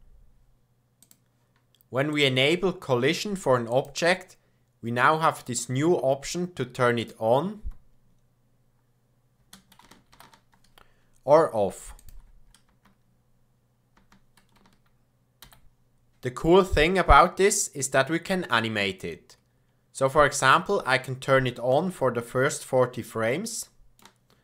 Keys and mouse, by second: 2.1 click, 7.5 space, 9.5 space, 10.1 shift+Left, 12.0 click, 12.4 middle click, 12.6 space, 14.5 shift+space, 15.4 shift+Left, 20.4 click, 21.7-24.0 shift+drag.